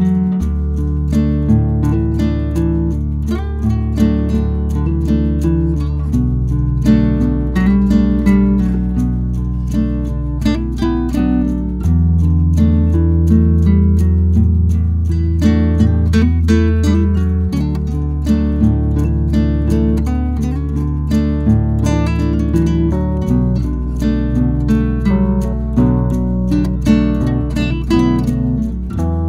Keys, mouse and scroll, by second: 9.3 click, 14.3 scroll up 1, 17.1 ctrl+q, 21.1 ctrl+q, 22.0 click.